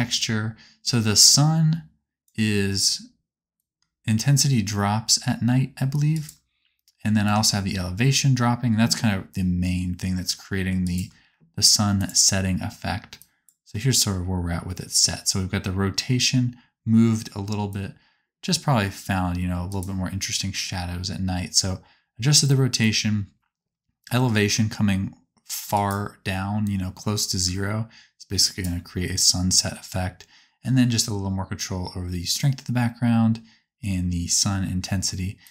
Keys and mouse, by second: 1.3-3.7 middle drag, 6.0 shift+click, 6.0 shift+right click, 7.2-11.1 shift+drag, 13.2-19.8 drag, 22.8-25.8 drag, 27.4-28.6 ctrl+drag, 28.7-35.4 middle drag, 35.4 right click.